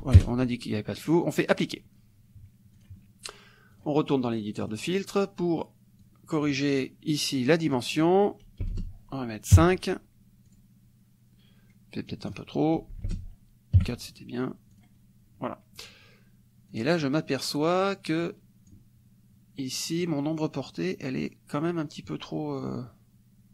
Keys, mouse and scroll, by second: 0.2 KP_0, 1.6 click, 2.8 click, 3.8 click, 4.7 click, 6.0 click, 7.8 click, 8.7 BackSpace, 9.6 KP_5, 10.6 click, 12.1 click, 13.1 BackSpace, 13.8 KP_4, 14.8 click, 16.7 click, 18.3 click, 21.0 click.